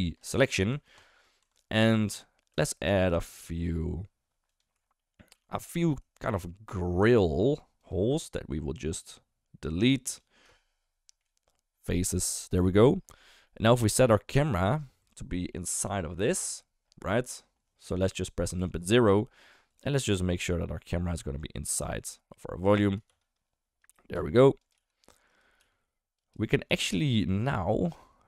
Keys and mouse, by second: 0.7 Tab, 0.9 click, 1.4 Tab, 1.9 ctrl+r, 5.0 middle click, 5.3 3, 7.1 shift+click, 7.8 shift+click, 10.1 shift+click, 11.2 Delete, 12.6 Tab, 13.4-14.0 middle drag, 14.5 shift+middle click, 15.0 Tab, 15.5 middle click, 15.8 Tab, 16.2 shift+middle drag, 18.6 KP_0, 19.1 drag, 19.7 click, 20.3 g, 23.1 shift+f, 24.1 g, 24.7 g, 25.3 middle click, 25.6 g, 26.7 g.